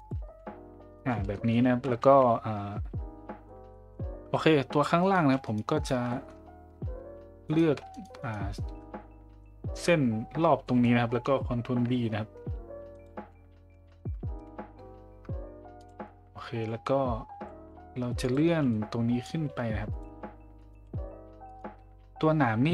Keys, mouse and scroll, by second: 0.0-3.6 drag, 3.6 a, 3.7 middle click, 6.1 middle click, 9.0 middle click, 10.6 middle click, 11.6 ctrl+b, 13.9 shift+middle click, 15.8 click, 18.2 click.